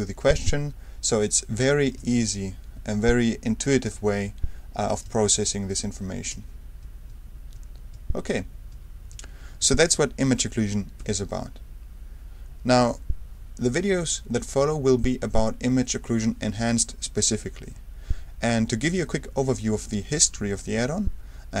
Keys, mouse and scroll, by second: 2.0 space, 3.7 space, 5.0 space, 6.3 space, 7.1 space, 7.9 space, 8.7 space, 11.0 d.